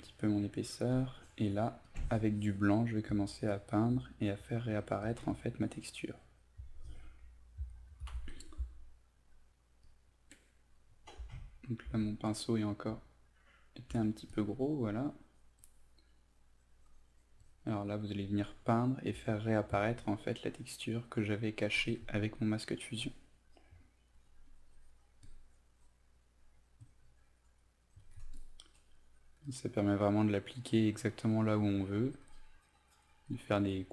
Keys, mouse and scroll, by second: 8.1 ctrl+alt+z, 8.4 ctrl+alt+z, 9.5 click, 11.4 alt+right click, 12.3 click, 13.0 alt+right click, 14.3-33.9 drag.